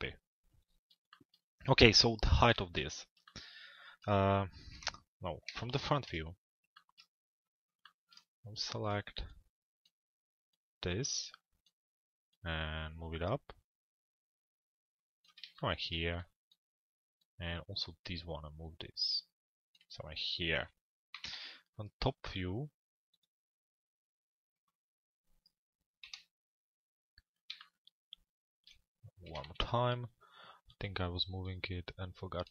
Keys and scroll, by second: 4.4-6.2 typing, 20.8 t, 21.3 z, 25.6 p, 29.0-29.9 typing.